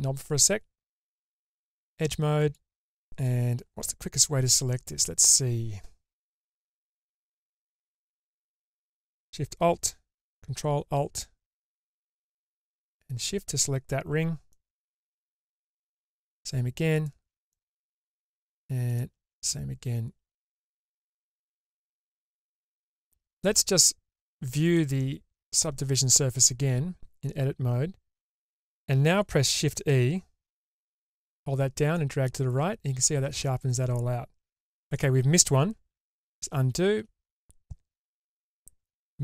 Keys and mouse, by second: 1.4 2, 2.5 alt+click, 14.7 middle click, 17.7 middle click, 19.5-21.5 middle drag, 22.0 shift+middle click, 24.8 click, 30.7 shift+e, 36.1 ctrl+z.